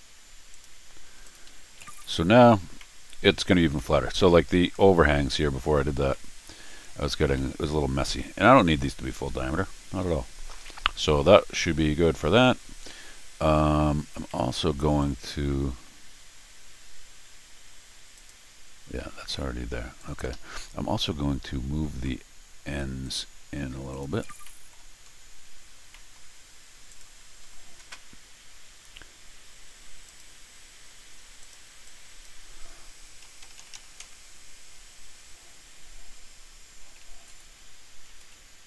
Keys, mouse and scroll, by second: 0.5 click, 1.2 click, 1.5 Escape, 1.6 scroll down 2, 1.9 r, 2.8 middle click, 3.8 middle click, 4.8 middle click, 6.1 middle click, 7.4 middle click, 7.9 scroll down 1, 8.2 middle click, 8.7 middle click, 10.7 middle click, 12.4 middle click, 14.3 middle click, 15.0 click, 18.2 click, 20.0 click, 20.3 Escape, 23.0 click, 23.9 click, 24.4 scroll up 2, 25.1-25.5 scroll down 2, 25.9 middle click, 26.9 click, 30.1 click, 31.4 click, 31.8 click, 37.3 Right, 38.1 Right.